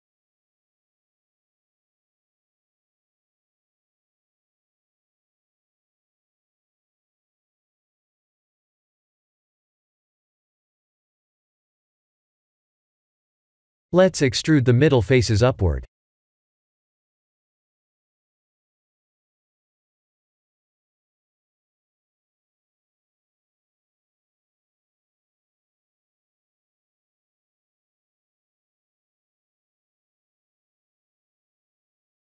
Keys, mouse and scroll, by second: 0.4 middle click, 1.0 click, 1.7 g, 5.8 KP_3, 6.9-7.7 scroll up 4, 7.7 middle click, 8.6 scroll down 2, 9.2 middle click, 9.6 middle click, 11.0 middle click, 12.1 3, 12.3 click, 13.2 ctrl+KP_Add, 15.0 c, 19.1 middle click, 21.6-22.6 scroll down 10, 22.6 middle click, 22.7 middle click, 22.9 middle click, 23.3 KP_1, 24.4 e, 27.6 s, 29.5 e, 31.3 s.